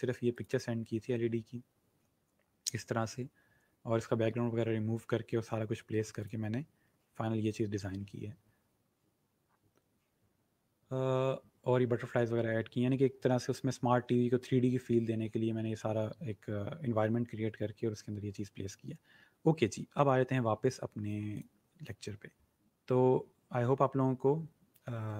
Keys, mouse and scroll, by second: 6.1 click, 22.0 click.